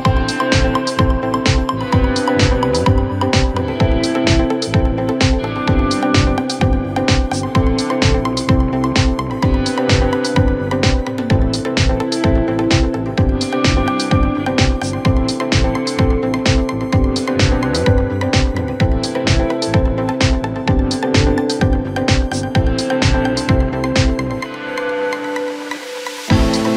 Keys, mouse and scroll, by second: 4.7 scroll down 2, 4.8 Tab, 7.0 click, 8.4 click, 9.1 scroll down 2, 9.3-10.6 middle drag, 10.6-11.3 scroll up 1, 11.3 KP_1, 13.6 click, 14.3-15.9 scroll up 1, 15.9-17.7 scroll down 1, 17.7 Tab, 19.2 click, 19.4 click, 20.5 click, 21.3-23.0 drag, 23.0 s.